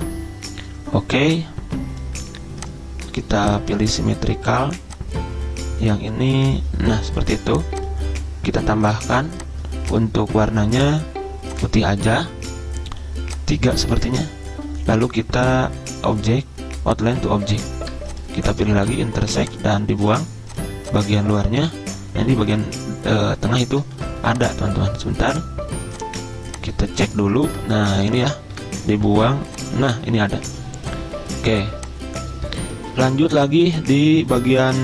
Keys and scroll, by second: 14.1 3, 14.2 Return, 21.8 Delete, 24.1 ctrl+z, 27.7 ctrl+z, 28.7 Delete, 33.1 z.